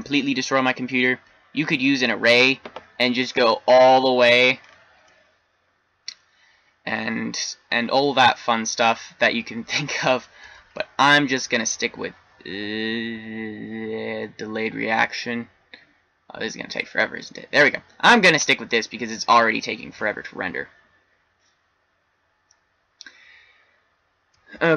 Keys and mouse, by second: 0.2-1.6 middle drag, 1.7 middle click, 2.0-5.5 middle drag, 11.0 shift+z.